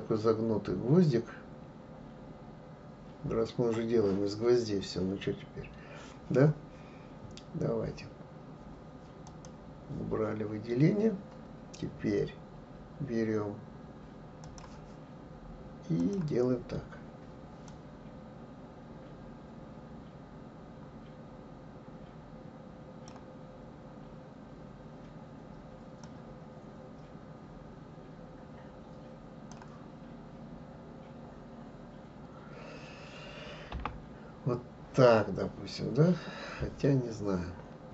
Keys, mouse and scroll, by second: 9.3 click, 14.4-17.4 drag.